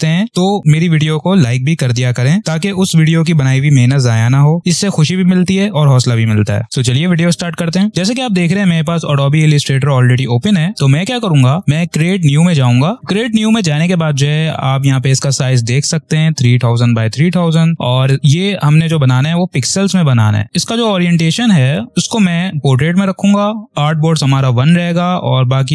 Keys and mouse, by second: 11.9 click, 19.2 click, 25.4 click.